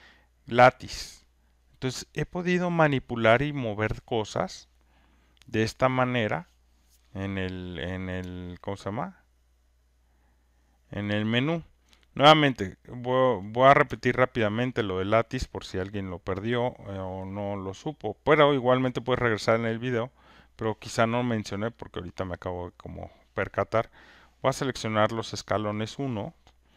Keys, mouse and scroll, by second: 11.8 alt+click, 14.5 alt+right click, 15.0 alt+middle click, 15.4 alt+click, 23.2 click, 24.0 click, 25.8 click.